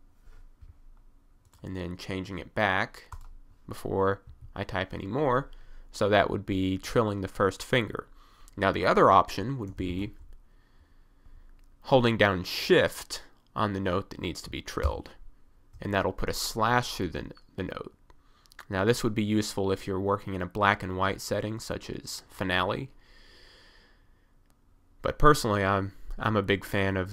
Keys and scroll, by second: 4.3 1, 9.7 f, 9.8 d, 9.9 s, 15.1 j.